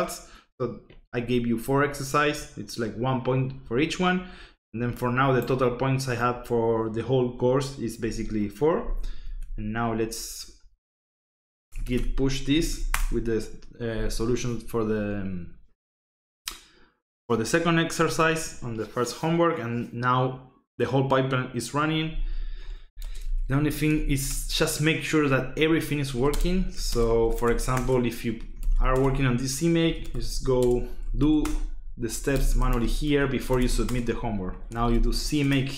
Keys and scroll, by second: 9.2 alt+Tab, 11.7-13.2 typing, 22.3-24.5 typing, 25.8-35.6 typing, 27.7 Return.